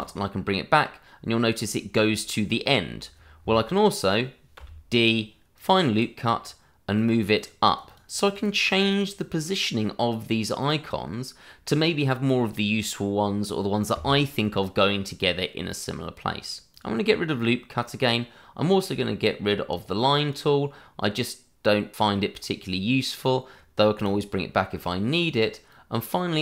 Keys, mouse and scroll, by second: 4.5 d, 5.5 click, 7.4 double click, 10.6 click, 16.7 click, 19.7 click, 24.0 click.